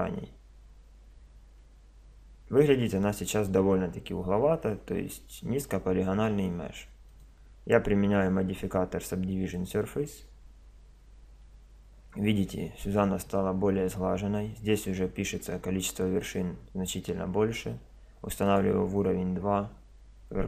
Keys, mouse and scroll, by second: 1.2 Tab, 2.8-4.6 middle drag, 7.1-8.8 drag, 18.4-20.2 drag.